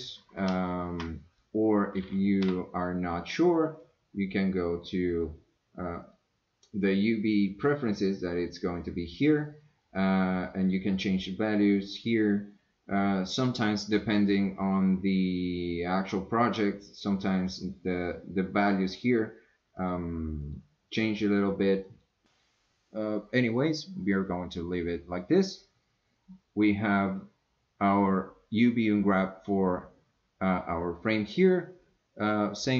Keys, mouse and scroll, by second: 0.5 ctrl+z, 2.4 u, 10.0-13.7 drag, 13.8-18.7 drag, 19.8 click, 20.4 click, 20.9 click, 21.9 click.